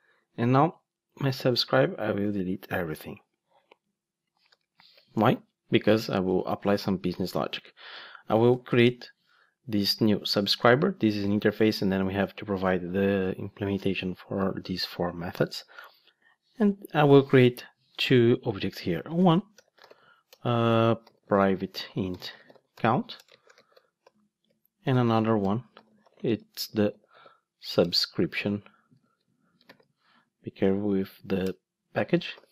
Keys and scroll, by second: 10.3 Return, 27.8 Return, 29.0 super+z, 29.7 ctrl+space, 31.4 Return.